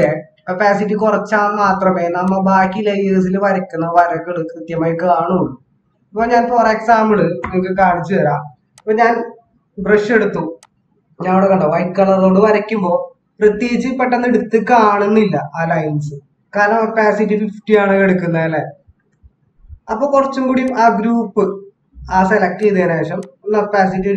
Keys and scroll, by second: 14.4 ctrl+=.